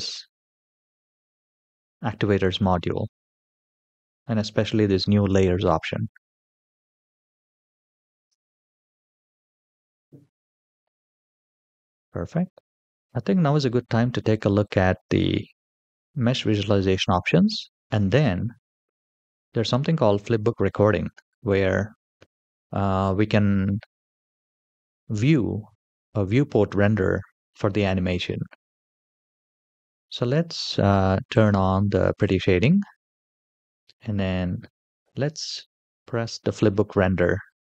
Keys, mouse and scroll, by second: 6.5-7.0 scroll up 2, 8.2 space, 9.5-11.1 drag, 12.9 click, 12.9 shift+middle click, 12.9-13.9 scroll down 1, 15.4 click, 31.1 click, 35.0 click.